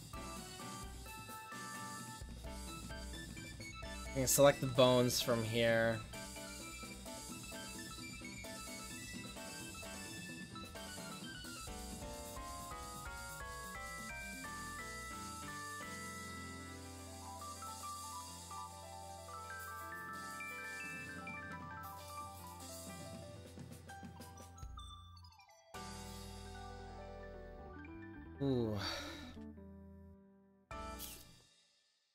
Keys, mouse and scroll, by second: 0.5-2.6 middle drag, 2.6-10.3 right drag, 10.4-11.9 drag, 11.5-13.5 middle drag, 11.5 right click, 18.9-20.5 drag, 19.5 right click, 20.5-31.3 middle drag, 31.8-32.1 middle drag.